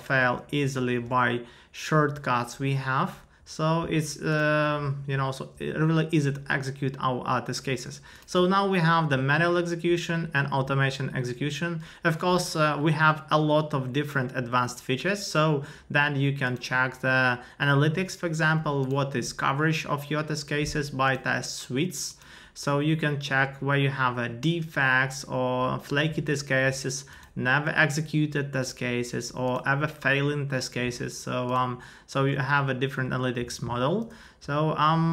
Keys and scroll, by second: 0.2 super+Return, 0.6 super+u.